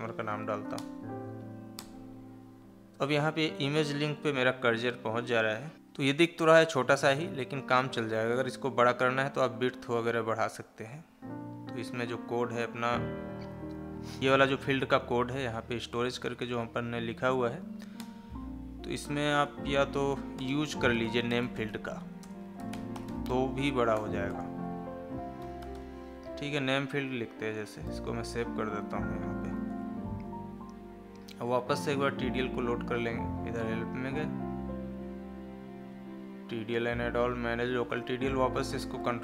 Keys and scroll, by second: 22.1 space, 27.8 ctrl+s, 29.7 alt+Tab, 30.4 Escape, 38.9 ctrl+a.